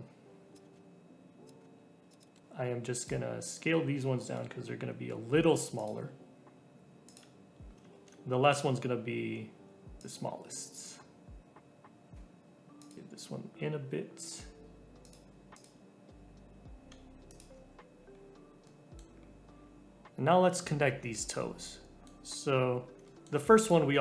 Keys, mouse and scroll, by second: 0.5 click, 0.7 shift+d, 1.6 shift+d, 2.2 click, 2.3 ctrl+l, 2.4 g, 3.4 click, 4.3 ctrl+l, 5.1 s, 5.9 g, 7.9 shift+d, 9.5 s, 10.2 g, 15.5 click, 16.2 g, 17.5 Tab, 18.0-18.6 scroll down 2, 18.6 middle click, 19.1-19.6 scroll down 3, 19.6-20.9 scroll up 2, 20.9 scroll up 1, 21.1 Tab, 21.3 middle click, 22.1-23.0 scroll up 4, 23.0 shift+middle click, 23.6 click.